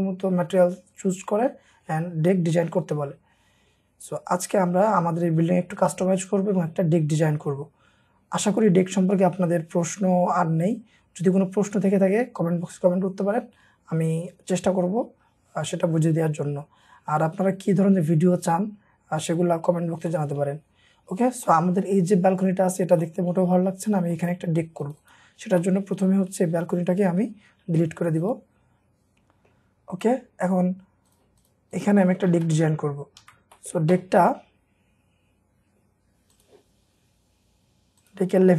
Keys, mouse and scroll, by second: 2.2-3.1 scroll down 1, 8.1-10.9 scroll up 1, 19.3 scroll up 1, 20.2 middle click, 20.7-21.2 scroll up 1, 21.2 scroll down 1, 21.5 middle click, 22.8 scroll down 1, 23.1 middle click, 23.8 scroll up 1, 24.2 middle click, 25.1 double click, 25.6 middle click, 27.8 Escape, 29.1 middle click, 29.7-30.6 scroll up 1, 31.4 double click, 32.1 middle click, 32.3 space, 32.6 scroll down 2, 33.2 Escape, 33.6 middle click, 33.7-34.5 scroll down 1, 36.7 scroll up 1, 38.3-38.5 scroll down 1.